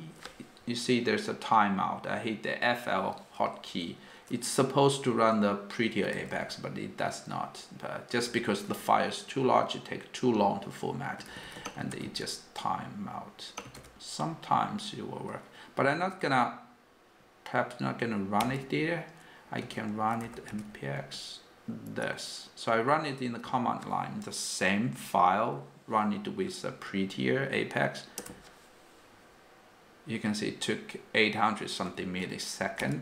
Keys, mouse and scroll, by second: 5.9-6.9 typing, 8.2 k, 8.7 j, 11.3 >, 11.8 f, 14.3-15.0 typing, 17.1-17.9 typing.